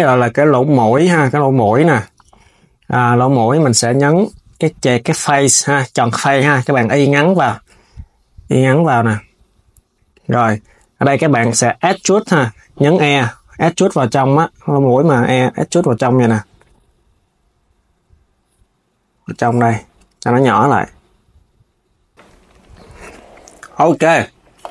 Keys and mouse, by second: 0.6 click, 22.8 click, 23.3 s.